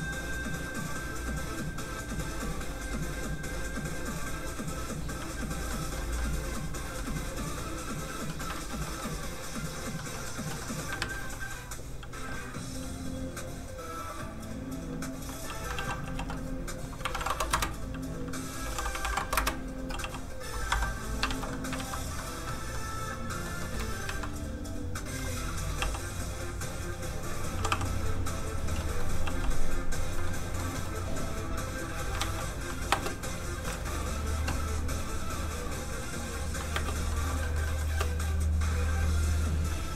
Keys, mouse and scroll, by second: 5.7 middle click, 7.5 click, 8.3 middle click, 8.5 alt+shift+z, 8.8 alt+middle click, 9.5 click, 9.5 middle click, 10.0 middle click, 10.0-10.9 scroll down 1, 11.0 shift+a, 13.0 click, 15.7 alt+shift+g, 16.1 z, 17.1 KP_8, 17.1 KP_1, 17.5 Return, 17.5 KP_0, 18.6-20.0 typing, 19.3 Return, 20.7 Escape, 21.0 scroll down 1, 21.3 alt+shift+z, 21.5 middle click, 21.7 alt+shift+middle click, 21.8 alt+shift+z, 22.1 scroll up 1, 22.2 middle click, 23.5 scroll up 1, 23.6 middle click, 24.0 shift+a, 25.2 a, 25.8 g, 26.9 click, 27.5 r, 28.5 click, 28.8 middle click, 29.0 scroll up 1, 29.2 g, 29.9 click, 30.2 middle click, 30.3 scroll up 1, 30.6 middle click, 31.2 click, 32.2 alt+shift+z, 32.9 space, 33.3 click, 33.7 alt+shift+z, 36.2 click, 36.7 space, 37.1 shift+middle click, 37.4 middle click, 37.5 middle click, 37.8 space.